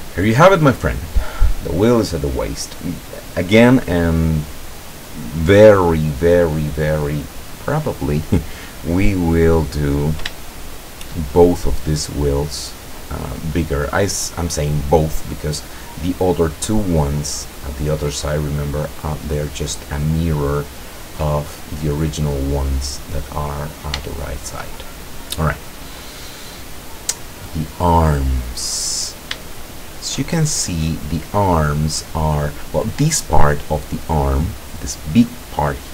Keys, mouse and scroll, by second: 10.5 shift+click, 16.7 click, 18.3-19.9 drag, 20.0 click, 21.3-22.3 drag, 24.1 shift+click, 24.6-25.2 shift+scroll up 2, 25.2 scroll up 1, 26.2 scroll down 2, 26.7-28.3 drag, 29.0 scroll down 1, 29.5-31.4 shift+drag.